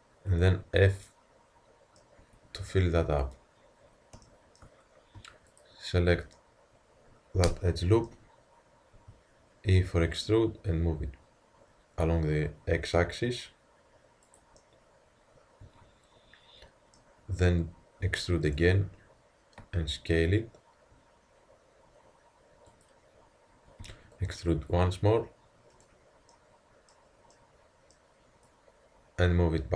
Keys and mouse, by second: 0.5 Tab, 2.2 Tab, 5.5-7.1 drag, 7.1 middle click, 9.0 e, 14.6-16.5 middle drag, 18.1 e, 19.6 s, 23.9 e, 26.3-26.8 middle drag, 28.5-29.1 middle drag, 29.1 click.